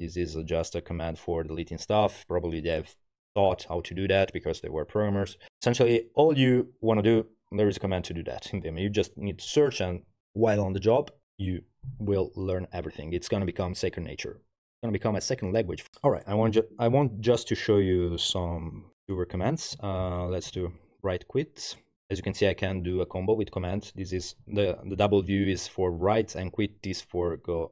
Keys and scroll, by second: 19.8-21.1 typing.